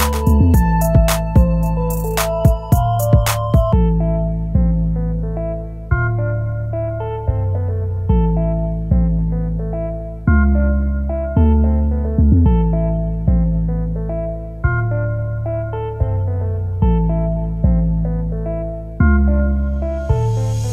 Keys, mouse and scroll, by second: 15.2 shift+click, 15.6 c, 19.0 right click, 20.1-20.7 scroll down 1.